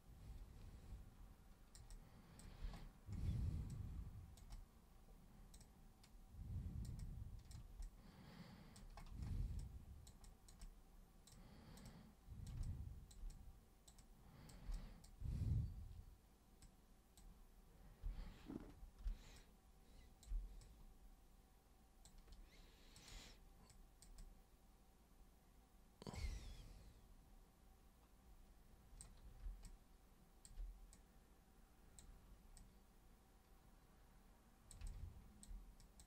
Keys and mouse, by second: 1.9 super+click, 3.7 super+click, 4.5-5.5 super+drag, 5.6-6.9 super+drag, 7.0 super+click, 7.9 alt+super+click, 9.6 super+click, 10.2 super+click, 10.6 super+click, 11.9 super+click, 12.7 alt+super+click, 13.3 super+click, 14.0 super+click, 14.7 alt+super+click, 16.7 super+click, 19.0 super+b, 19.4 click, 20.6-22.1 drag, 23.0 super+click, 23.7 super+click, 24.2-29.0 super+drag, 29.6 alt+super+click, 31.0-32.0 super+drag, 32.6-34.8 super+drag, 34.9 alt+super+click, 35.8 super+click.